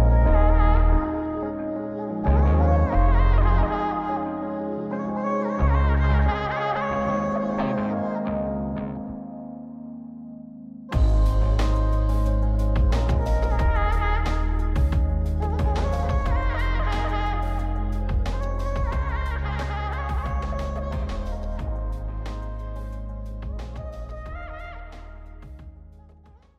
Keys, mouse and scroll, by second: 2.5 click, 3.3-4.1 scroll up 4, 4.1 scroll down 2, 4.4 middle click, 5.6 click, 6.2 m, 7.1 m, 8.0 m, 8.5 m, 9.7-16.9 drag, 17.7-21.0 drag, 19.5 KP_3, 21.6 click, 22.0 m, 22.6 m, 23.6 click.